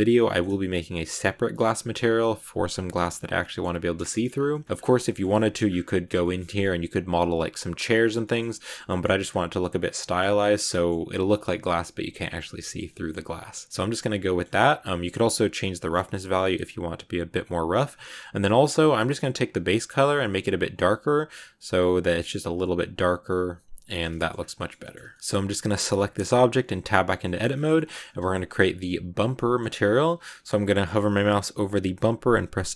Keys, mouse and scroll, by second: 4.2-4.6 scroll up 4, 4.4 middle click, 4.6 scroll down 1, 4.7 scroll up 1, 4.8 middle click, 5.2-6.1 shift+scroll up 5, 5.2 shift+middle click, 6.1-7.9 shift+middle drag, 7.9-8.5 scroll down 7, 8.1 middle click, 8.5 scroll up 1, 8.5 scroll down 1, 8.6 middle click, 8.9 scroll up 1, 9.1-9.5 scroll down 3, 9.5 middle click, 10.2 scroll up 2, 10.5-15.5 middle drag, 15.5-17.7 drag, 17.7 scroll up 5, 19.2 click, 24.0 scroll up 2, 24.0 middle click, 24.3 a, 24.3-25.0 scroll down 4, 24.5 shift+middle click, 25.0 middle click, 25.2 right click, 26.4 Tab, 27.1 shift+middle click, 27.6-28.1 scroll up 1, 28.1 shift+middle click, 28.2 scroll down 1, 28.4-32.7 middle drag.